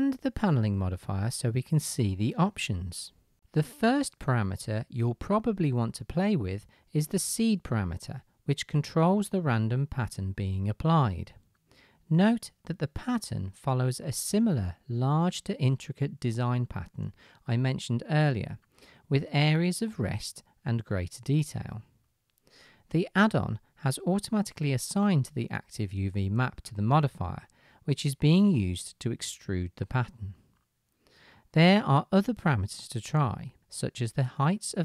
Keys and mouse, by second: 8.2-32.2 middle drag, 8.2-11.9 right drag, 14.4-15.0 drag, 14.4-15.0 right drag, 32.2-34.8 drag.